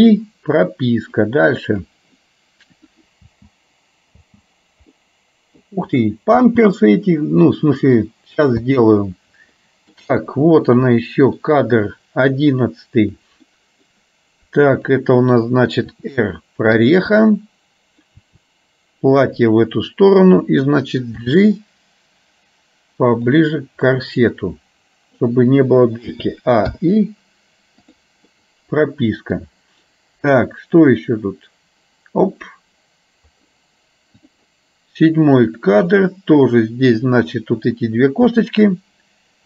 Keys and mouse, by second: 0.0 i, 1.5 click, 3.5 space, 4.3 space, 5.0 middle click, 6.5 space, 8.8 space, 9.6 middle click, 11.0 middle click, 13.1 click, 13.6 middle click, 16.0 r, 17.2 middle click, 18.3 r, 21.2 g, 24.1-25.3 middle drag, 27.0 i, 28.5 middle click, 31.1-32.5 drag, 35.6 click, 36.1-37.3 middle drag, 38.6 shift+click.